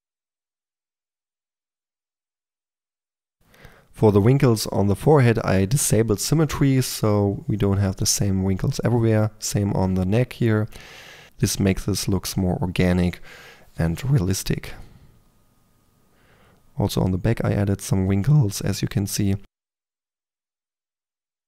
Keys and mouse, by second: 0.0-2.6 typing, 0.0 click, 0.3 click, 1.2 click, 1.7 click, 2.6 click, 3.3 click, 3.8-6.3 drag, 3.8 f, 5.3 f, 6.5 1, 6.6 f, 6.7 click, 7.0 f, 7.3-7.9 drag, 8.1-8.9 typing, 8.4 drag, 10.1 middle click, 10.6-13.0 typing, 11.1 click, 11.5 middle click, 11.6-12.7 drag, 13.4-14.9 drag, 15.1-21.4 typing, 17.4 click, 17.9 drag, 18.4 click, 19.9-20.3 drag, 21.2 click.